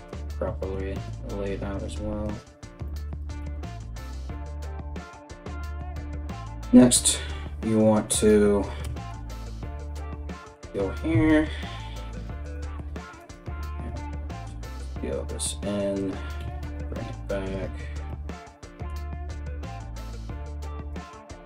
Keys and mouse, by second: 1.3-21.4 middle drag, 1.3 right click, 1.5 g, 3.0 Tab, 8.4 Tab, 10.7 KP_3, 12.8 right click, 13.4 s, 16.0 g, 20.5 right click.